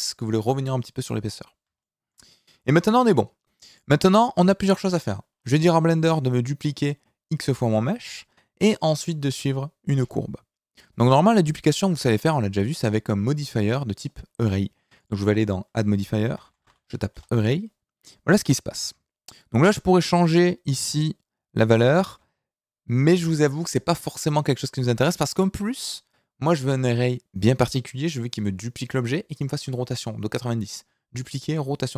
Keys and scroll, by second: 2.7 KP_1, 16.5 r.